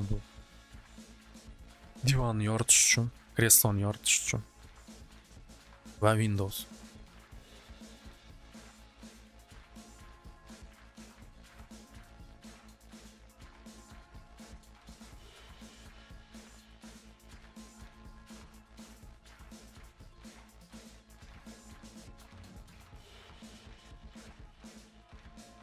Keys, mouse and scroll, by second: 3.9-5.0 middle drag, 5.7 click, 6.8 click, 7.6 scroll, 8.4-9.1 scroll, 10.0 click, 10.9 click, 11.2 click, 12.3 click, 13.2 click, 16.4 click, 17.0 click, 17.4 c, 19.5 click, 19.7 click, 20.3 c, 21.2 click, 21.4 click, 21.8 c, 22.8 click, 23.0 click, 23.4 c, 24.5 click, 24.7 click, 25.5 c.